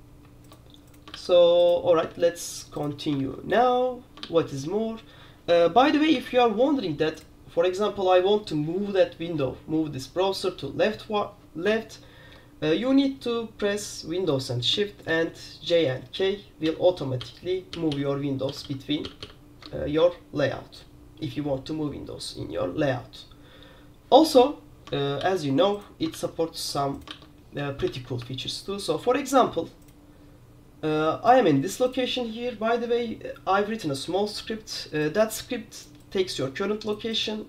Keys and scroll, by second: 1.3 super+q, 2.4 super+q, 3.3 super+q, 4.4 super+q, 6.2 super+w, 15.4 super+k, 16.7 super+j, 17.3 super+j, 17.8 super+k, 18.0 super+k, 18.6 super+j, 18.8 super+j, 19.2 super+k, 19.3 super+k, 25.3 super+q, 26.3 super+q, 27.6 super+q, 28.0 super+2, 28.3 super+1.